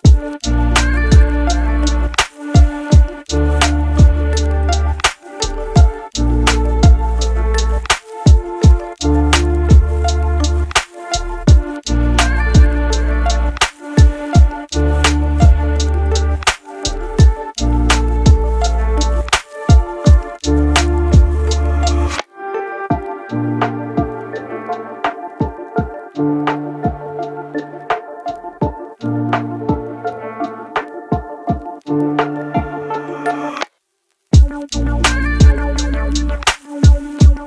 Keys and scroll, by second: 3.7 ctrl+z, 9.1 ctrl+z, 11.7 ctrl+z.